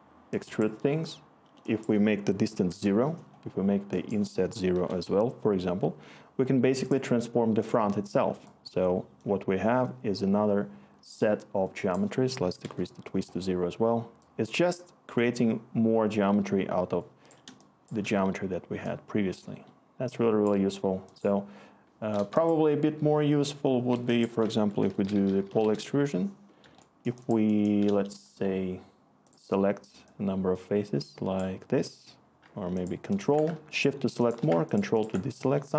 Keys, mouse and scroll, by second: 2.4 0, 2.7 Return, 4.7 0, 4.9 Return, 12.6 Return, 17.5 Return, 23.9 Delete, 24.6 Tab, 25.6 Return.